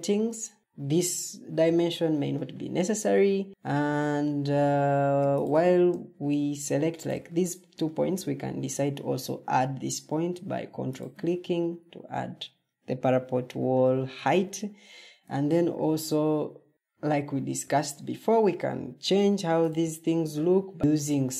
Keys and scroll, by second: 0.9 Delete, 15.5 ctrl+t.